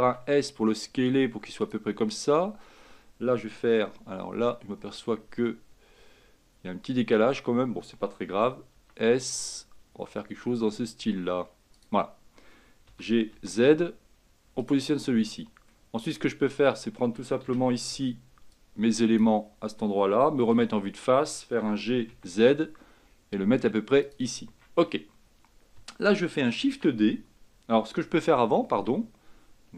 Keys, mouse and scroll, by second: 4.3-6.6 scroll up 3, 8.9 s, 13.0 g, 15.0-15.8 scroll down 2, 15.8 middle click, 16.6 Tab, 17.6 a, 18.0 b, 20.6 KP_1, 21.7 g, 24.6 Tab, 26.8 shift+d.